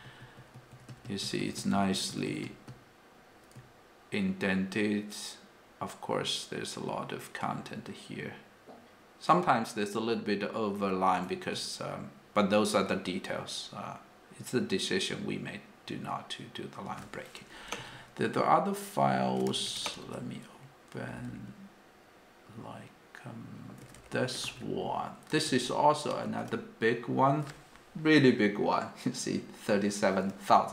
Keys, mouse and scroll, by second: 0.0 ctrl+d, 0.2 ctrl+d, 0.4 ctrl+d, 0.7 ctrl+d, 0.9 ctrl+d, 1.0 ctrl+d, 1.2 ctrl+d, 1.4 ctrl+d, 1.6 ctrl+d, 1.7 ctrl+d, 1.9 ctrl+d, 2.1 ctrl+d, 2.4 ctrl+d, 2.7-10.8 ctrl+d, 11.5-17.0 ctrl+d, 17.8 f, 19.5 Escape, 19.8 space, 20.0 -, 21.1 k, 23.7-26.3 typing.